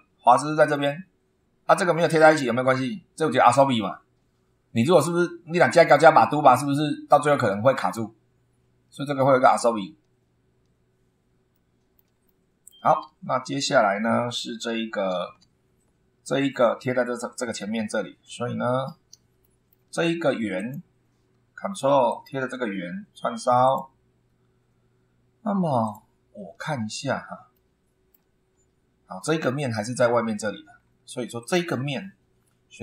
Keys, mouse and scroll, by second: 8.9-9.3 scroll down 2, 9.8-10.1 scroll down 2, 11.5 shift+middle click, 12.3 shift+middle click, 13.0 ctrl+1, 17.6 super+2, 18.4 super+scroll up 3, 19.4 shift+middle click, 20.5 click, 22.1 ctrl+click, 23.6 click, 25.8 click, 26.3 scroll up 1, 27.5 shift+middle click, 28.5 shift+scroll up 1, 30.7-31.0 scroll down 1, 31.4 click, 32.0 scroll down 1, 32.4 middle click.